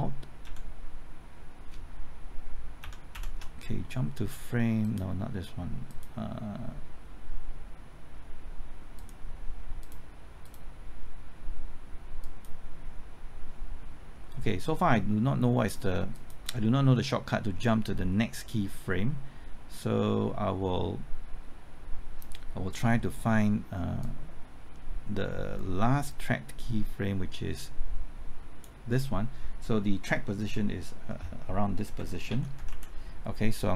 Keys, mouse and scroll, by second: 0.4 ctrl+shift+Right, 2.8 ctrl+shift+Left, 3.1 ctrl+shift+Right, 3.1 typing, 4.8-28.9 drag, 31.9 Right, 32.3-32.7 typing.